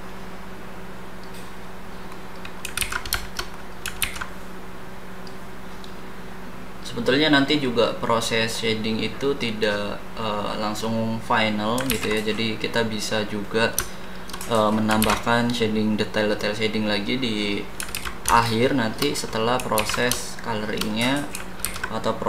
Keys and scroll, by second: 2.7 ctrl+z, 4.0 ctrl+z, 11.9 ctrl+z, 15.0 ctrl+z, 17.9 ctrl+z, 19.7 ctrl+z, 21.6 ctrl+z.